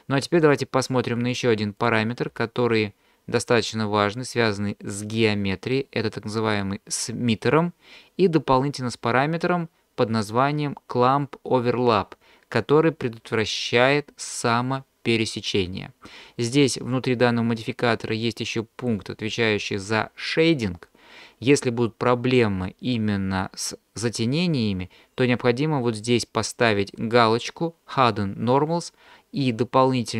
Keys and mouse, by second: 1.8 click, 18.8 click.